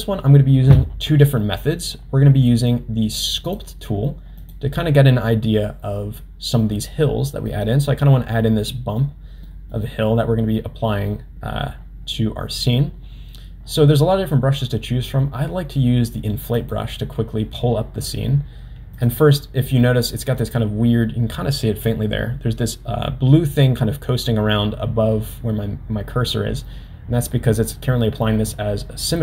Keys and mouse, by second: 3.6-5.0 drag, 7.6 middle click, 8.8 middle click, 9.6 middle click, 16.6 click, 18.9 click, 19.8-27.7 middle drag, 27.7 click.